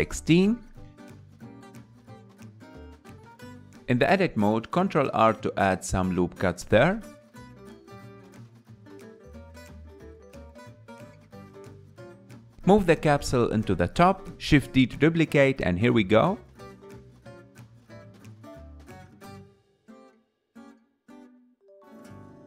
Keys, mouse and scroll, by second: 3.7 click, 4.0 Tab, 4.5 scroll up 1, 4.9 shift+middle click, 5.6-6.2 scroll up 3, 7.4 ctrl+r, 12.0 Tab, 12.3-13.1 scroll down 5, 13.1-14.2 shift+middle drag, 14.2 g, 16.9 shift+d, 18.5 scroll up 7, 18.7 shift+middle click, 18.9-20.9 typing.